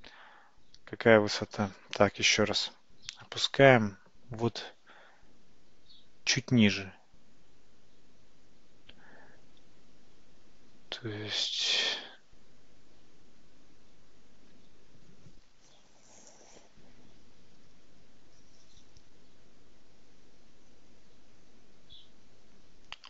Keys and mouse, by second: 2.0 ctrl+z, 3.2 g.